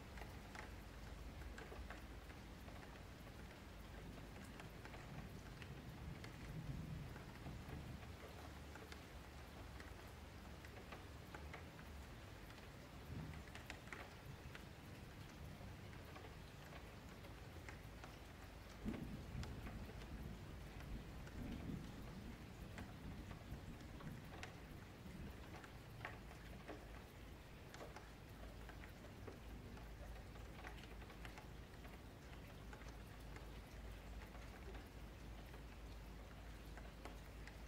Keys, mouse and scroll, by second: 1.1 shift+Tab, 3.1 click, 5.4-7.7 drag, 8.7-11.0 middle drag, 11.0 click, 12.4-13.0 middle drag, 13.0 scroll up 4, 13.3 F3, 14.1-15.9 scroll down 4, 15.9 middle click, 16.4-17.3 scroll up 3, 17.3 F3, 17.7-18.2 scroll down 2, 18.2 F3, 19.1 scroll down 1, 19.3-20.2 shift+middle drag, 20.2-21.5 scroll up 6, 21.5 click, 23.9 scroll down 6, 24.1 scroll up 1, 24.2-25.3 middle drag, 25.3-26.0 scroll down 5, 26.0 shift+middle click, 26.4-26.9 scroll up 5, 26.9 shift+middle click, 27.2-30.3 scroll up 3, 37.1-37.6 middle drag.